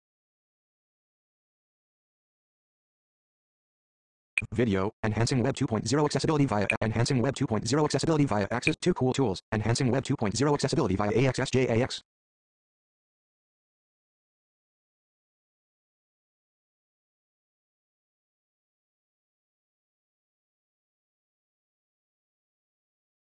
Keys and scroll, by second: 4.2 Page_Down, 6.5 Page_Down, 8.4 Page_Down.